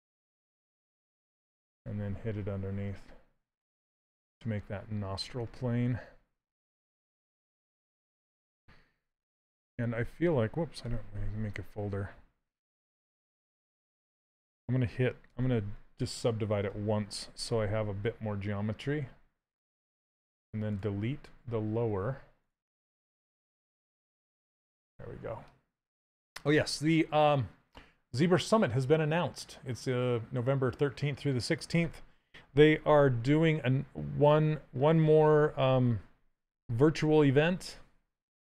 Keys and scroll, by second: 9.4 ctrl+f, 10.5 Escape, 15.7 ctrl+d, 36.7 ctrl+z.